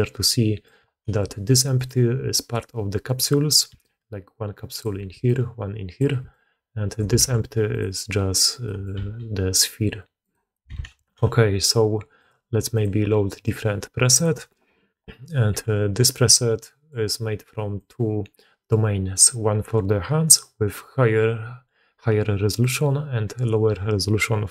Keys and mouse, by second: 0.7 click, 3.6 d, 3.7-4.7 drag, 4.7 d, 5.2 click, 5.9 d, 6.2-6.9 drag, 7.1 alt+a, 8.8 g, 10.6 alt+a, 10.9 click, 12.7-13.4 drag, 14.1-15.9 drag, 16.5 middle click, 17.9-24.5 drag.